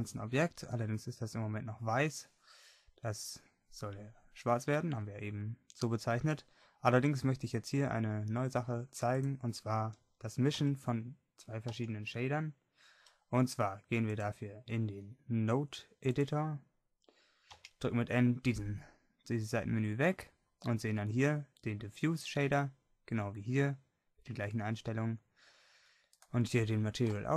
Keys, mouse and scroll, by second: 6.3-8.6 middle drag, 26.2-27.3 right drag.